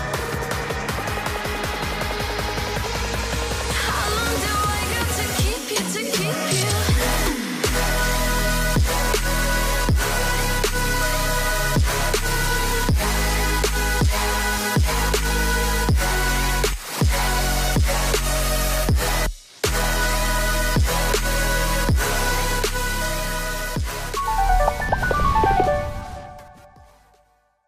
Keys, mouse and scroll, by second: 0.3 Return, 0.8 alt+scroll up 1, 3.7 ctrl+t, 6.1 Return, 6.7 alt+scroll down 1, 8.0 alt+click, 9.2 ctrl+t, 9.6 alt+scroll up 7, 12.2 Return, 12.5 Up, 12.7 Up, 13.7 ctrl+t, 15.8 Return, 16.2 Down, 16.3 Down, 16.8 Up, 17.3 alt+scroll down 1.